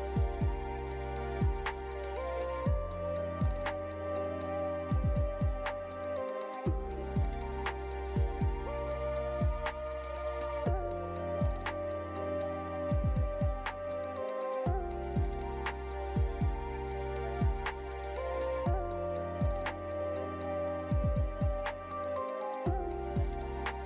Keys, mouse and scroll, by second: 1.1 ctrl+middle click, 1.4 shift+middle click, 1.6 middle click, 1.7 shift+middle click, 1.9 middle click, 2.1 shift+middle click, 2.7 shift+a, 6.0 s, 8.1 click, 9.6 click, 10.9 0, 12.7 click, 13.4 click, 14.8 click, 16.5 ctrl+middle click, 16.8 shift+middle click, 17.0 ctrl+middle click, 17.1 middle click, 18.6 click, 19.2 click, 21.0 click.